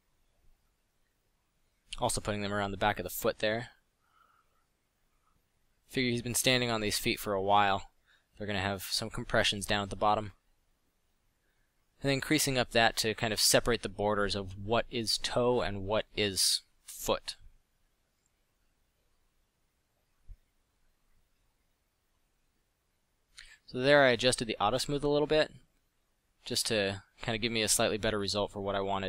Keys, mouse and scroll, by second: 3.4 f, 5.2 f, 18.6 f, 20.2 f, 24.3 middle drag, 25.9 middle click, 28.5 f.